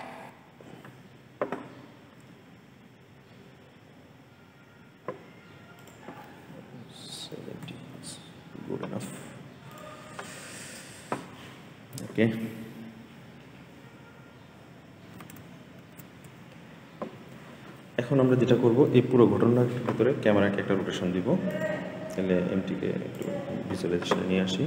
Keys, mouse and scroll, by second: 0.1 space, 5.6-8.8 drag, 9.6 click, 15.6 ctrl+s, 18.6-19.2 scroll down 3, 20.3-21.4 scroll down 17, 21.4 click, 23.0 click.